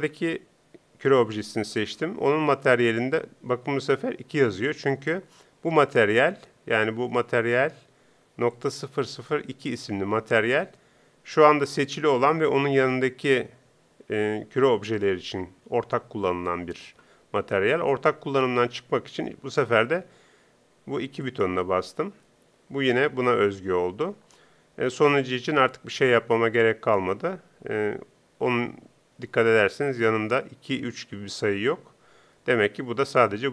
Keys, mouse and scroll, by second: 8.5-10.2 drag, 21.2-23.0 drag, 24.9-26.5 right drag.